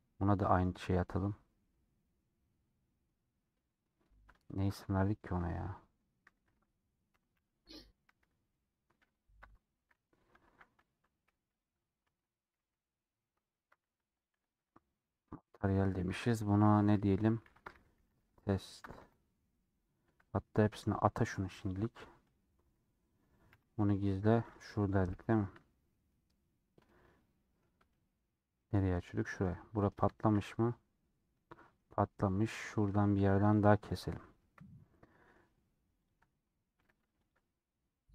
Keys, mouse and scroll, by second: 12.0 Tab, 12.5 /, 12.9 scroll down 2, 13.8 alt+h, 14.0-22.7 drag, 22.7 middle click, 23.1-23.4 scroll up 2, 23.4 h, 23.8-24.4 scroll up 1, 24.4 click, 25.0 /, 25.2-29.4 middle drag, 29.4-29.7 scroll up 1, 29.7 middle click, 30.3-30.9 scroll down 1, 30.9-33.5 middle drag, 33.5 click, 33.9 click, 34.3 KP_Decimal, 35.0-36.1 middle drag, 36.1 ctrl+click, 36.8 a.